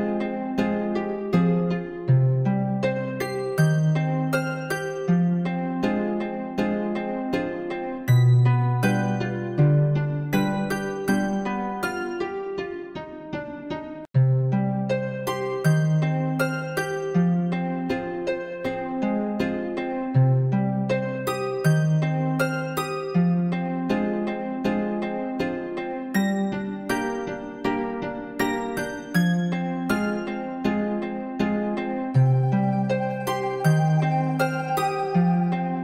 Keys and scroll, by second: 10.3 ctrl++, 14.5 ], 33.8 ctrl+u.